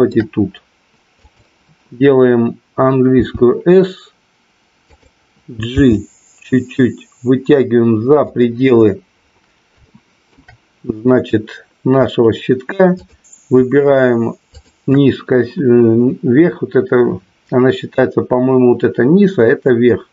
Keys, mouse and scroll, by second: 1.2 click, 4.9 click, 5.7 g, 8.2 click, 9.9 shift+middle click, 14.5 shift+click.